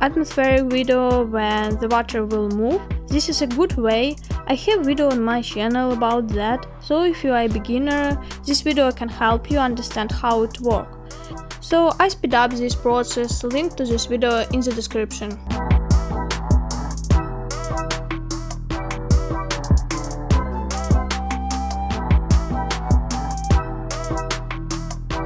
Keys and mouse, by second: 3.5-4.5 middle drag, 6.0 g, 10.5 middle click, 13.5 s, 16.6-17.0 shift+middle drag, 17.8 g, 21.8-23.0 middle drag, 23.3 middle click, 24.1 middle click.